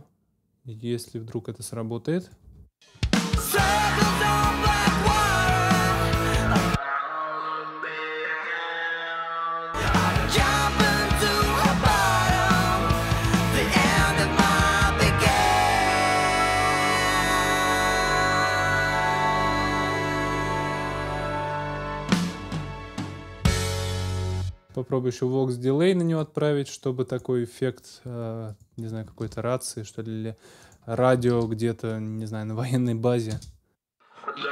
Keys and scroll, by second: 2.4 space, 23.9 space, 29.2 super+s, 31.3 super+s, 33.3 space.